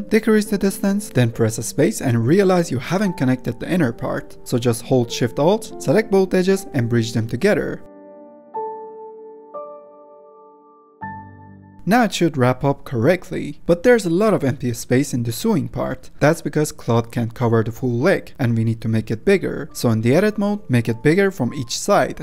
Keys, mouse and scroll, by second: 0.2-1.7 drag, 1.7 space, 4.0 Tab, 4.4 2, 4.7 alt+click, 5.5 click, 5.7 middle click, 5.9 alt+click, 6.5 middle click, 6.9 ctrl+click, 7.5 ctrl+click, 7.8 middle click, 8.2 alt+shift+click, 8.4 ctrl+z, 8.7 shift+click, 8.8 shift+middle click, 9.2 right click, 10.0 3, 10.4 middle click, 10.7 x, 11.7 middle click, 11.9 Tab, 12.5-16.1 middle drag, 17.0 space, 17.2-18.3 middle drag, 18.3 Tab, 18.4 middle click, 19.0 a, 19.5 s, 20.5 g, 21.5 s.